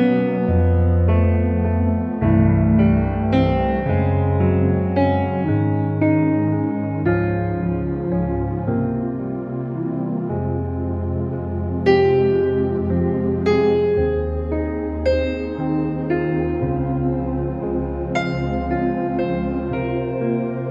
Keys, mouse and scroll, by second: 1.8 ctrl+u, 2.7 click, 6.2 ctrl+u, 6.9-7.9 drag, 8.7 ctrl+t, 9.4 ctrl+-, 10.0-10.7 alt+drag, 12.7 space, 15.6 ctrl+j, 16.5 click, 18.3 right click, 19.0 click.